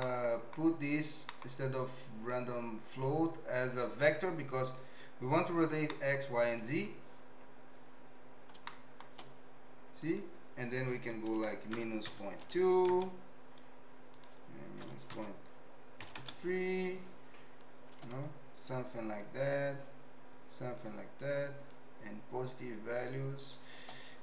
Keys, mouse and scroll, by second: 0.1 middle click, 2.3-4.2 drag, 6.0 middle click, 8.7-9.0 shift+middle drag, 10.0-13.1 drag, 14.3-16.7 drag, 17.7-21.2 drag, 21.7-23.6 shift+drag, 24.0-24.2 drag.